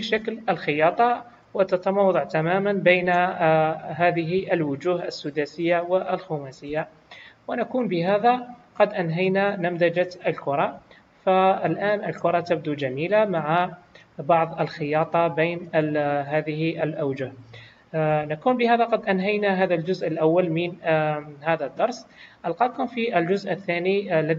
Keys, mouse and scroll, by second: 0.4-0.7 scroll down 2, 1.8 scroll up 2, 2.5-2.9 scroll down 1, 3.7 scroll down 1, 4.8 middle click, 4.8 scroll down 1, 6.6 KP_1, 11.7 click, 12.4 middle click, 15.0 middle click, 18.1 KP_1.